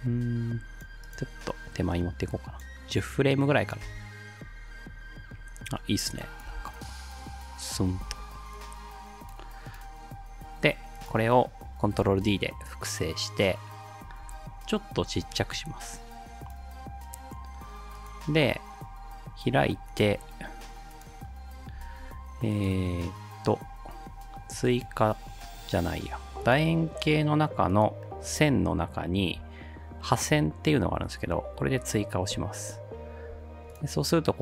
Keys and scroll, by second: 3.9 space, 6.5 space, 8.0 space, 12.0 ctrl+d, 14.2 v.